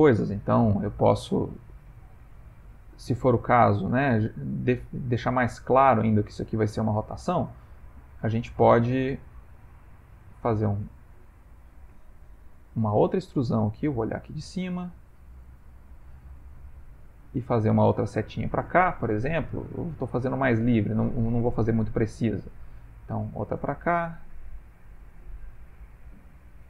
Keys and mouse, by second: 1.2 click, 2.0 middle click, 3.0 middle click, 5.3 middle click, 6.9 middle click, 10.1 e, 12.4 ctrl+z, 13.7 click, 14.9 e, 16.4 e, 17.3 click, 17.6 e, 19.4 click, 19.4 g, 21.0 shift+middle click, 22.1 click, 22.8 e, 25.6 e.